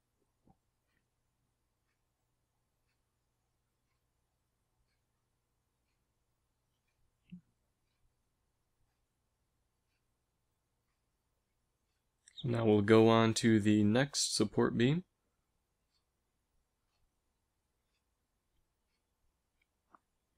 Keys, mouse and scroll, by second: 1.1 ctrl+r, 4.5 ctrl+r, 8.4 middle click, 9.0 ctrl+r, 10.3 ctrl+r, 11.9 middle click, 19.1 ctrl+r.